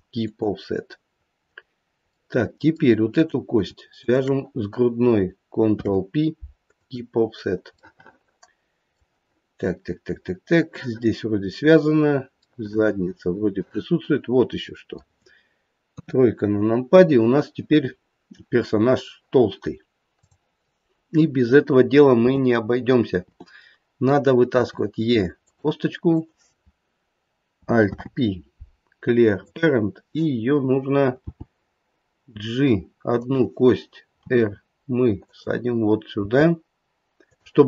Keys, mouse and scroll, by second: 1.1-2.2 scroll down 2, 2.3 middle click, 3.1 middle click, 3.1 click, 3.9 shift+click, 5.6 ctrl+p, 7.3-8.7 scroll down 3, 7.7 middle click, 10.0-10.8 scroll up 2, 12.5 middle click, 12.7 middle click, 13.3 middle click, 13.8 middle click, 15.9 KP_3, 16.5-17.6 scroll up 3, 17.8-18.9 scroll down 3, 20.1 click, 22.2 t, 23.1 t, 24.5 e, 26.1 click, 27.7 alt+p, 31.2 g, 34.2 r, 36.2 g.